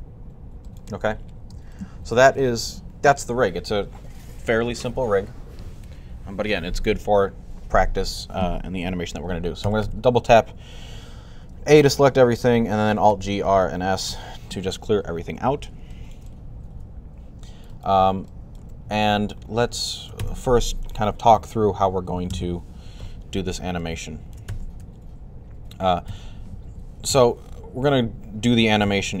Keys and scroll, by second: 9.2-10.0 typing, 12.8 alt+g, 13.1 alt+r, 13.8 alt+s, 21.8-22.6 typing, 24.6 typing, 25.9 typing, 26.9 typing, 28.8 typing.